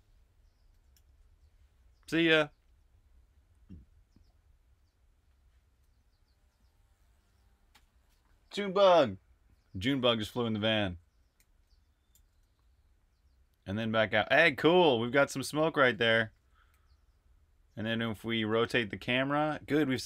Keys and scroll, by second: 0.8 super+r, 0.8-2.1 typing, 1.3 super+h, 10.0-12.3 typing, 14.1-20.0 typing.